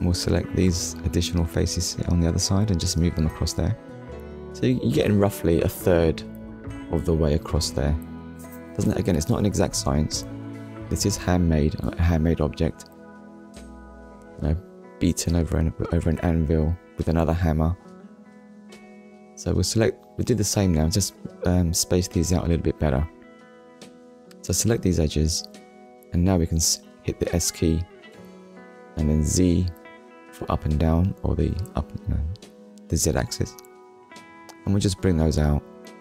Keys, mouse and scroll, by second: 0.2 shift+click, 1.2 shift+click, 2.2 click, 6.6 click, 7.7 click, 8.1 middle click, 8.9 scroll down 1, 9.5 shift+middle click, 9.9 middle click, 10.9 scroll up 1, 12.3-12.7 scroll up 1, 12.7 middle click, 13.8 click, 16.5 ctrl+click, 17.6 shift+click, 18.6 shift+click, 19.3 shift+click, 20.3 middle click, 21.0 shift+middle click, 22.7 scroll up 1, 24.0 shift+click, 24.5 shift+click, 25.4 shift+click, 27.1 ctrl+click, 27.9-28.3 scroll down 1, 28.4 middle click, 30.3 shift+middle click.